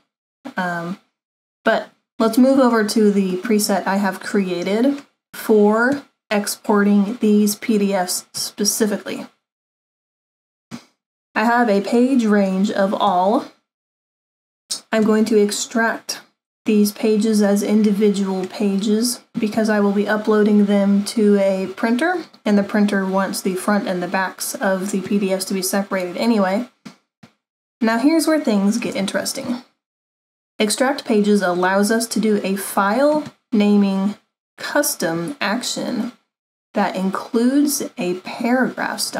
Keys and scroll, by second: 29.0 super+=.